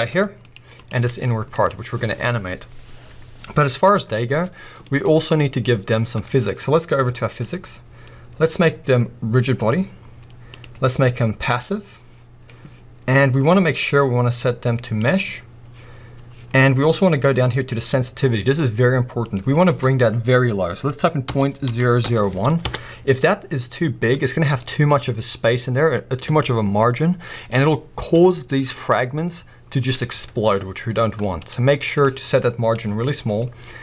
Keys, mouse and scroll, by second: 0.1 g, 0.5 right click, 0.8 click, 1.1 g, 1.7 right click, 4.4-4.9 middle drag, 4.9-5.5 scroll up 1, 5.5 scroll down 1, 7.4-24.6 drag, 22.7 Return, 24.6-33.3 middle drag, 33.3-33.8 drag.